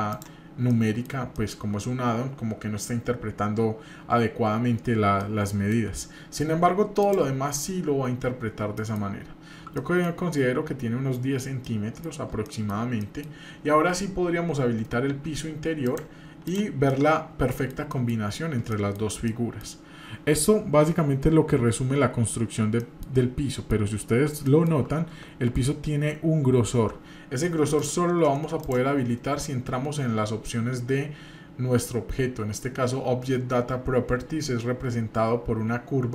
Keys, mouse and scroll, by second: 0.1 click, 0.7 middle click, 1.3 shift+middle drag, 5.2 middle click, 7.0 click, 8.8 middle click, 9.1-9.6 scroll up 2, 9.8-10.2 shift+middle drag, 11.3-12.0 scroll down 2, 11.6-12.0 middle drag, 12.4-12.8 shift+middle drag, 13.0 middle drag, 15.9 click, 16.4 click, 16.9-18.1 middle drag, 18.3-18.6 scroll up 2, 18.7 shift+middle click, 19.3 shift+middle click, 22.8 shift+middle click, 23.5 middle click, 23.9-24.4 scroll up 3, 24.4 shift+middle click, 24.8-25.4 shift+scroll up 3, 27.8 click, 28.6 click.